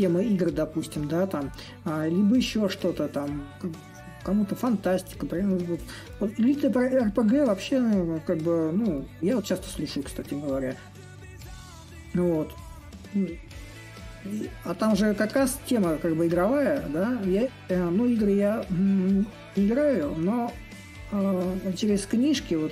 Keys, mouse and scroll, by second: 5.4-10.5 drag, 10.9-16.0 drag, 16.2-21.3 drag, 21.7-22.7 drag.